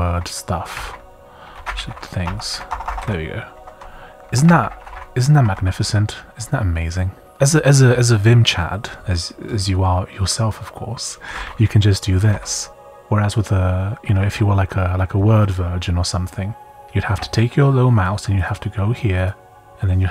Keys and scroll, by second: 0.0-3.5 typing, 3.5 Escape, 4.4 Left, 4.5-5.8 typing, 5.4 Escape, 7.0-7.8 typing, 9.1 typing, 11.0-12.8 typing, 14.0 i, 15.9 typing.